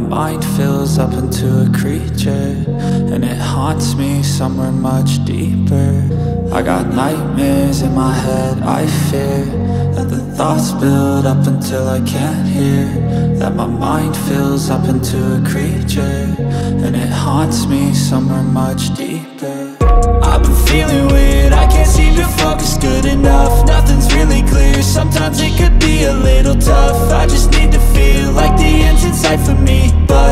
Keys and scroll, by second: 8.1 ctrl++, 8.3-10.6 space, 12.6 ctrl+-, 13.4 ctrl+-, 13.4 ctrl++, 13.5 ctrl++, 15.6 ctrl+-, 15.8 ctrl+-, 25.6 ctrl++, 26.4 ctrl++.